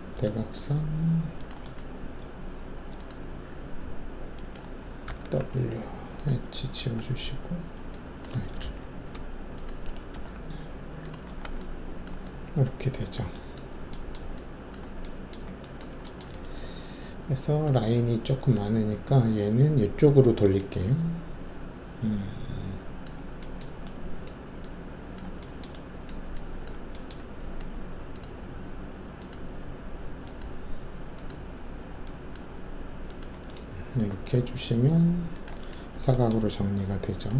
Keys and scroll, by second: 5.0 w, 6.7 alt+q, 8.6 ctrl+alt+z, 10.1 alt+q, 11.2 alt+q, 27.4 alt+s.